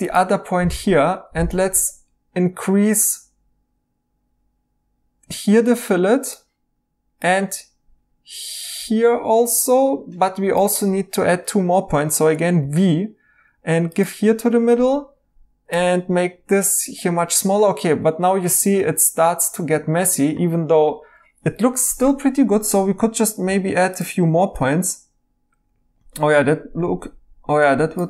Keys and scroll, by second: 12.6 v, 18.6 e, 21.9 e, 23.5 v.